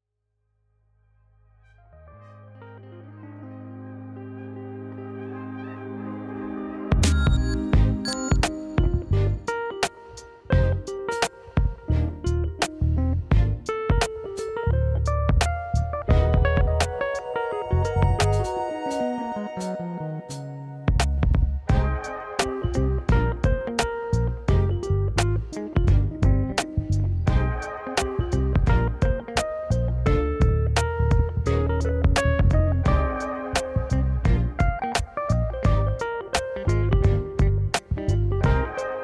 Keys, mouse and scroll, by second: 0.0 click, 2.5 click, 4.3 shift+a, 6.5 scroll down 1, 7.7 g, 9.1 s, 11.0 g, 11.9 s, 13.7 click, 14.0 click, 19.1 click, 19.4 click, 20.0 click, 20.5 click, 25.9 ctrl+z, 26.0 ctrl+z, 28.6 click, 29.1 click, 29.3-29.6 drag, 36.3 click, 36.7 s.